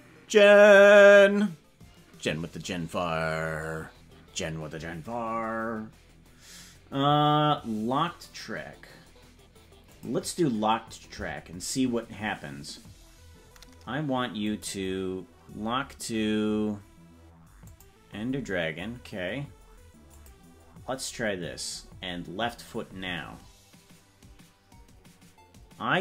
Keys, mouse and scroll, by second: 14.4 click, 20.1-26.0 drag.